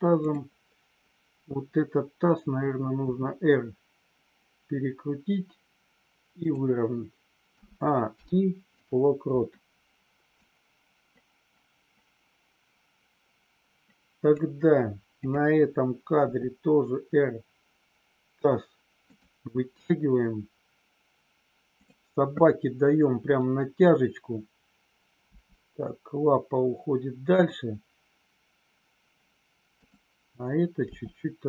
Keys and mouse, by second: 0.2-0.7 drag, 3.0 r, 6.3 click, 8.1 i, 10.4-14.4 drag, 15.1 click, 16.2 r, 19.0 click, 21.7 click, 25.3 g, 29.7 click.